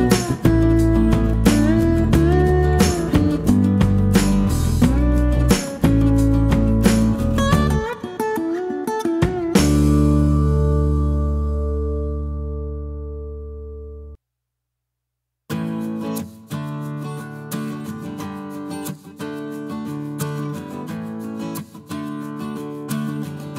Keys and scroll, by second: 12.0 h, 14.6 d, 16.7 s.